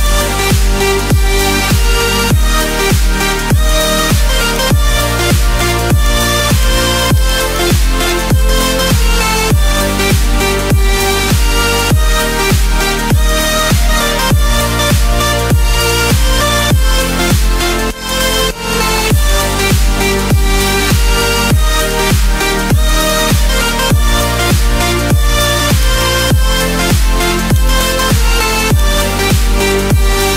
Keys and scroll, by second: 2.6 ctrl+z, 10.6 ctrl+d.